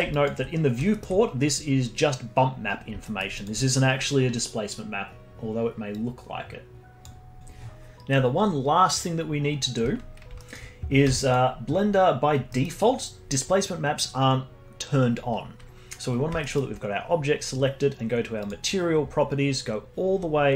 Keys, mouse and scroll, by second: 0.9-2.0 alt+middle drag, 2.0-3.0 scroll down 1, 3.0 alt+middle drag, 3.3-7.2 alt+drag, 7.2 scroll down 2, 10.3 middle click, 11.0 z, 12.3 scroll down 2, 12.5-15.5 middle drag, 16.4-18.4 alt+middle drag, 18.4 click, 19.1-20.4 scroll down 22.